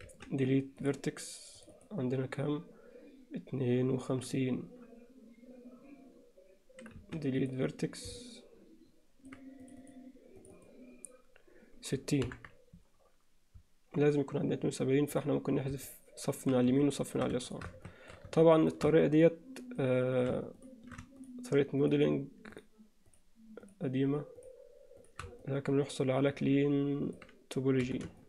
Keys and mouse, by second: 0.1 x, 1.6 click, 7.0 x, 8.2-9.3 alt+middle drag, 9.8 click, 10.4 click, 12.3 ctrl+KP_7, 15.9 middle click, 17.5 shift+click, 17.9 shift+middle click, 19.0 alt+middle click, 21.2 shift+click, 22.6 shift+click, 25.0 shift+click, 25.4-27.2 middle drag, 27.8 c.